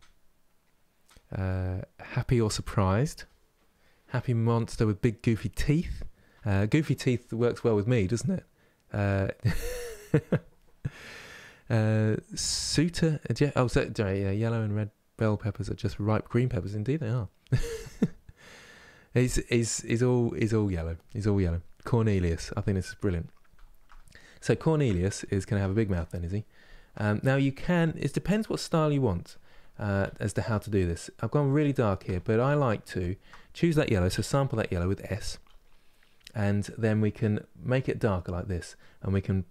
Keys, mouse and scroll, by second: 22.6-37.5 middle drag, 37.5-39.5 drag.